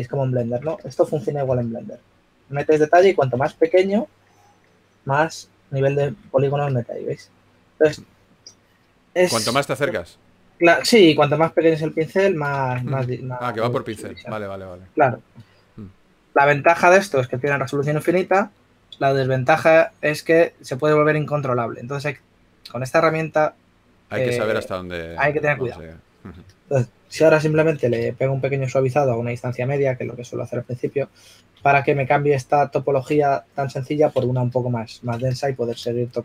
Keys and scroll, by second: 1.9-2.7 typing, 3.7 s, 11.4 super+z, 13.8 super+z, 14.2 s, 15.3 shift+f, 16.1 s, 28.1 typing, 33.5 shift+f.